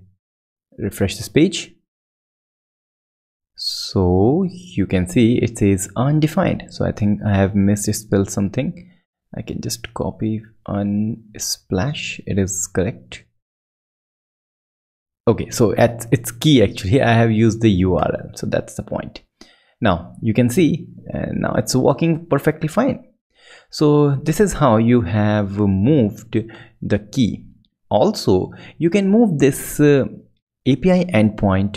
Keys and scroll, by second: 11.7 super+Right, 12.3 alt+super+Left, 13.0 Left, 13.6 super+Left, 15.8 super+Right, 18.4 alt+super+Left, 19.8 ctrl+Left, 23.5 ctrl+Right, 24.2 ctrl+super+Right.